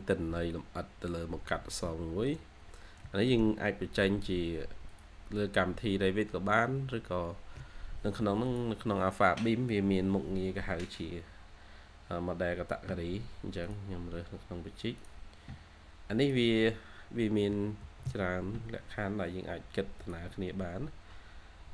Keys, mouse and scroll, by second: 1.0 scroll down 1, 1.4 middle click, 2.3-2.9 shift+scroll down 2, 2.9 middle click, 17.5-19.7 typing, 19.0 scroll down 1.